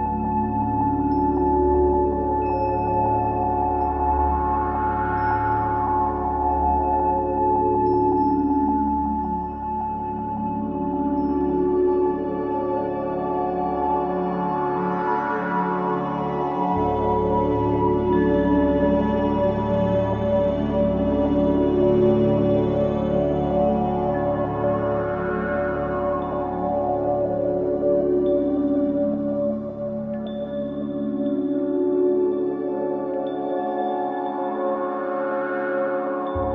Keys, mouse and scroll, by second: 3.2 e, 6.2-8.7 middle drag, 8.7-10.2 drag, 10.8 ctrl+b, 15.0-16.5 middle drag, 18.0 middle click, 18.4-20.0 middle drag, 22.6 ctrl+z, 24.0-25.5 drag, 25.5 scroll down 3, 25.9-26.3 middle drag, 26.3 scroll down 1, 26.4 click, 28.1 alt+a, 28.9 click, 31.4 ctrl+a, 32.6 click, 33.4 ctrl+a, 34.4 click, 35.8 ctrl+a.